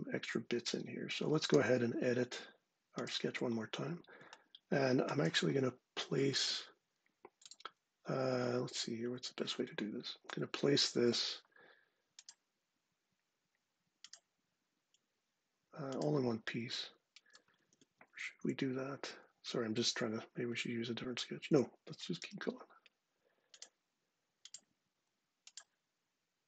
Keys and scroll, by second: 17.3 ↻, 21.9 i.